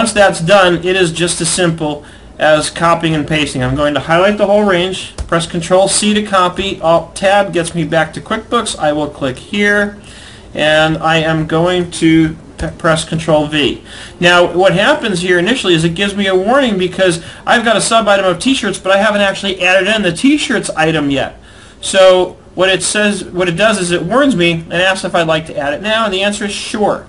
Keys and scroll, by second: 4.8 ctrl+c, 6.7 alt+Tab, 12.3 ctrl+v.